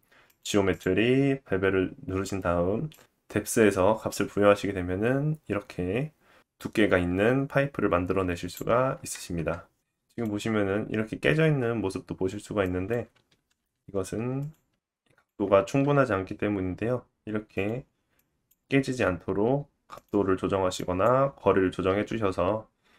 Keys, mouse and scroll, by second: 11.4 Tab, 13.5 g, 14.5-17.1 middle drag, 15.0 g, 17.1-18.4 drag, 17.7 g, 18.4 middle click, 18.7-20.4 drag, 19.9 g, 20.6-22.5 drag, 21.0 g, 22.7 e.